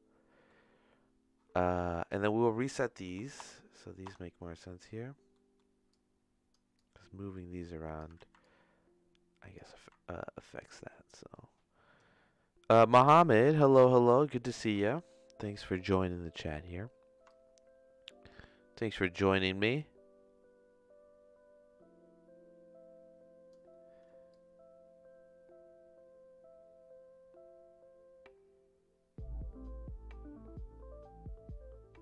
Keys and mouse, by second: 1.6 middle click, 3.4 BackSpace, 4.3 BackSpace, 5.3 middle click, 5.9 click, 6.7-8.0 drag, 8.3 ctrl+z, 8.4-9.5 drag, 9.9 ctrl+z, 10.6-12.0 drag, 13.8 ctrl+z, 14.8 middle click, 15.9 middle click, 17.3-19.2 shift+drag, 19.7-23.6 shift+drag, 24.3-32.0 shift+drag.